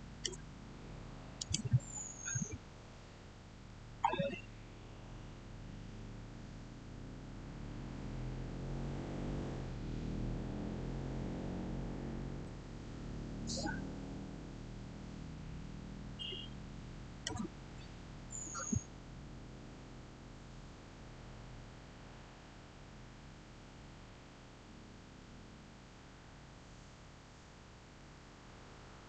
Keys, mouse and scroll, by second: 1.2 click, 3.8 scroll up 1, 12.1 scroll up 1, 12.3-20.1 shift+middle drag.